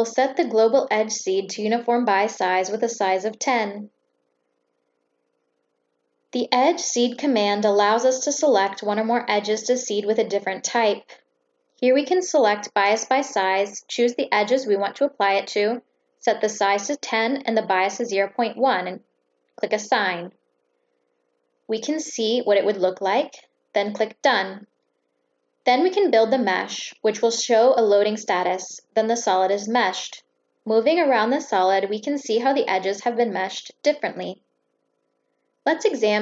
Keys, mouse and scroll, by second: 1.1 click, 1.9 click, 2.4 click, 4.1 click, 5.8 click, 6.8 click, 7.6-7.9 drag, 8.3 click, 12.8 click, 14.2 click, 15.0 click, 16.5 click, 18.2 click, 18.7 click, 19.5 click, 21.3-23.7 right drag, 23.8 click, 25.0 click, 35.9 middle click.